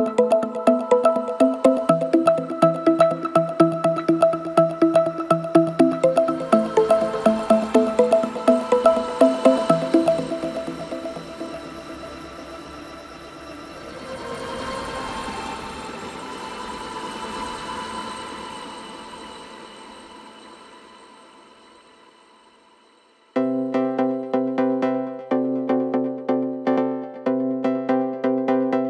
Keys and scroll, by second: 5.0 ], 10.8 ], 11.3 ], 14.0 4.